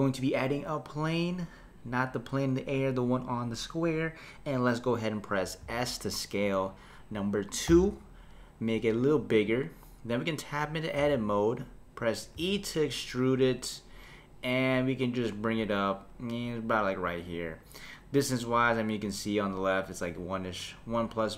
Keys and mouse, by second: 5.6 s, 11.0 Tab, 12.3 e.